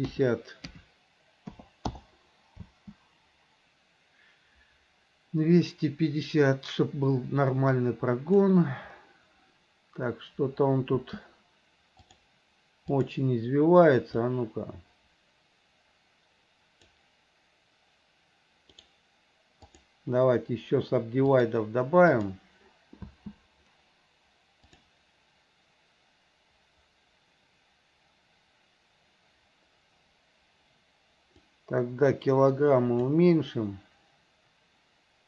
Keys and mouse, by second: 2.8 space, 8.0 click, 11.1 space, 12.2-13.3 drag, 14.5-17.1 drag, 18.9-20.0 right drag, 21.5-22.5 drag, 23.2 space, 24.8 click, 31.6-33.2 drag.